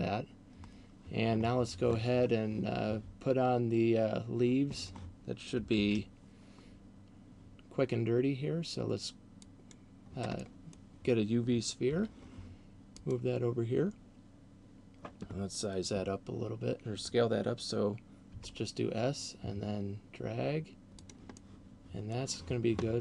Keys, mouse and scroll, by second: 3.3-5.1 scroll down 1, 5.8 shift+a, 10.6 middle click, 11.8 g, 13.3 click, 18.3 s, 21.3 click, 21.3 middle click.